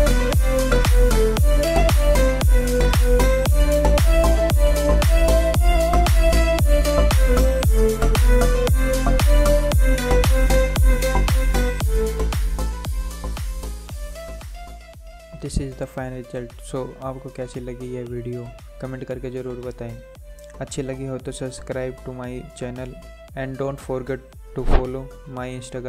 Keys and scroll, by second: 2.5 Return, 10.0 3, 10.6 Return, 12.1 alt+Return.